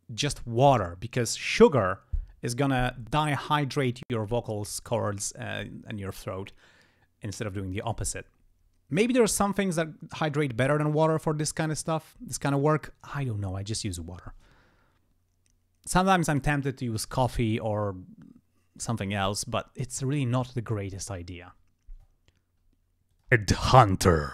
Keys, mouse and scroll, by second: 23.1 click, 23.3 space, 23.5 ctrl+scroll up 1.